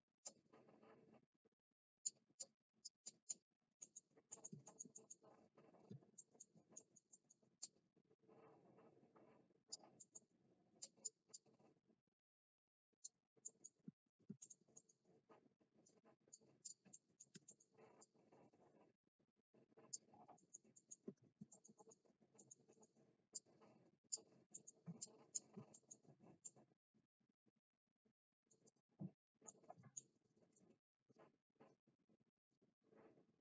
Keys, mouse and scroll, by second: 0.2-2.0 drag, 2.4-2.8 scroll up 1, 3.0 scroll up 1, 3.2 click, 3.8 middle click, 4.3 middle click, 4.6 shift+middle click, 5.0 middle click, 6.1 shift+middle click, 6.8 middle click, 7.1 middle click, 7.5-9.7 drag, 9.9 middle click, 10.7 click, 11.2-13.0 drag, 13.4 middle click, 14.4 shift+middle click, 14.7 middle click, 15.8 click, 16.6 click, 17.0 middle click, 17.5 shift+middle click, 18.0-19.9 drag, 20.3 middle click, 20.7 middle click, 21.2 ctrl+z, 21.5 shift+middle click, 21.7 middle click, 22.3 middle click, 22.7 middle click, 23.3 click, 24.5 middle click, 24.9 click, 25.7 shift+middle click, 26.4-28.5 middle drag, 28.7 right click, 29.4 middle click.